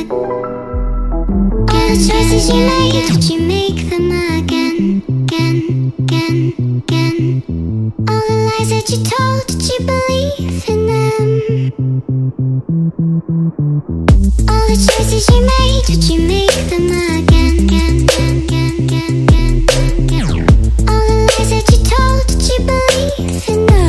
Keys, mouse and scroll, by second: 0.2 click, 0.6 click, 0.8 ctrl+click, 1.7 click, 2.8 ctrl+alt+i, 3.6 click, 5.0-7.2 drag, 5.5-6.0 typing, 7.4 BackSpace, 8.4-10.9 typing, 9.6 Tab, 10.9 Return, 11.9 ctrl+0, 12.5 ctrl+alt+0, 13.3 ctrl+space, 13.8 click, 14.3 Tab, 15.3 click, 16.1 click, 17.0 click, 18.0 Tab, 18.0 click, 18.9 ctrl+click, 19.1 click, 19.3 click, 19.5 click, 19.8 ctrl+click, 20.6 click, 20.8 ctrl+click, 21.1 click, 21.4 click, 21.5 ctrl+click, 22.2 click, 23.7 shift+click.